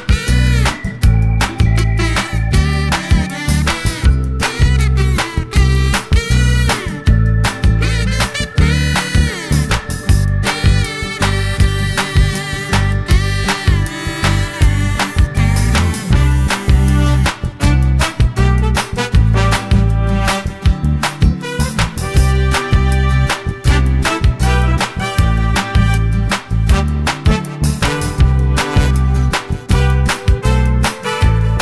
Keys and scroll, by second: 26.6 super+d, 27.4 shift+Right.